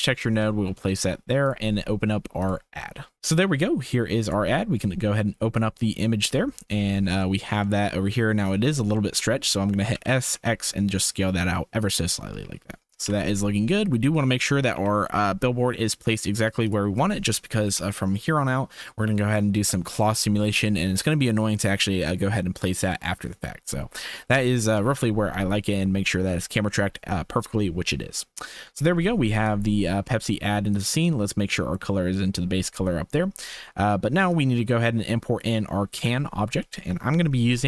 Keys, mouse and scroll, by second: 0.9 shift+click, 7.2 shift+click, 7.6-8.2 drag, 9.9 s, 13.0 KP_0, 14.2 shift+middle click, 14.7 g, 17.2 shift+middle click, 17.6 ctrl+s, 24.3 shift+middle click, 24.7 ctrl+s, 25.4-27.9 drag, 28.4 shift+middle click, 28.7 ctrl+s, 29.5 click, 30.7-31.8 drag, 34.3-35.4 drag, 35.9 n.